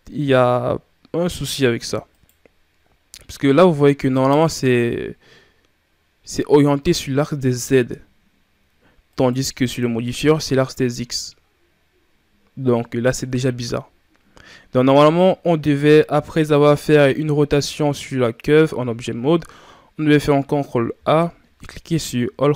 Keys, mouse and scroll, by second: 2.0 right click, 3.4 scroll up 1, 8.9 right click, 16.2 right click, 20.8 ctrl+a.